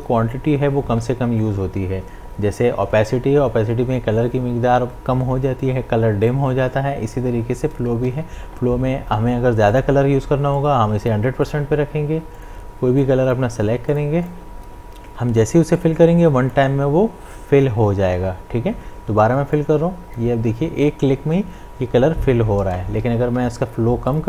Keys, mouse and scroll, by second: 8.1 ctrl+z, 9.7-18.9 drag, 19.5-22.4 drag, 22.8 click, 23.1 ctrl+z, 24.1-24.2 drag.